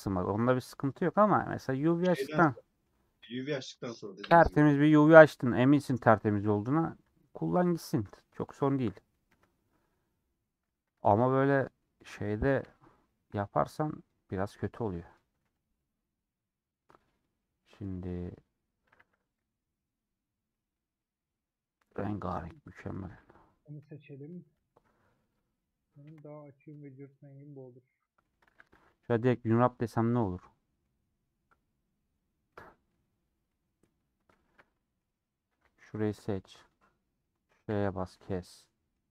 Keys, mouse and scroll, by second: 0.0 scroll up 2, 1.1 ctrl+click, 2.0-3.2 middle drag, 3.2 3, 4.5 ;, 5.3 click, 6.6 click, 6.7-8.0 middle drag, 8.0 ctrl+click, 9.2 KP_Decimal, 9.7 scroll down 1, 9.8-10.8 middle drag, 10.8 3, 12.7 ;, 14.1 click, 14.5 scroll down 4, 14.7 middle click, 15.2 2, 16.2 scroll down 1, 16.2-18.0 middle drag, 18.0 click, 18.7 scroll down 3, 18.9 a, 20.4-23.7 middle drag, 23.7 /, 24.4 Tab, 24.8 scroll down 3, 25.2 click, 26.0 KP_Decimal, 26.8 Tab, 26.8-28.5 middle drag, 28.5 a, 30.0-32.3 middle drag, 32.3 scroll down 1, 32.4 middle click, 32.9-33.4 scroll up 2, 33.4 middle click, 34.0 scroll up 1, 34.3-35.6 shift+middle drag, 35.6 3, 37.8 ;, 38.2-39.1 middle drag.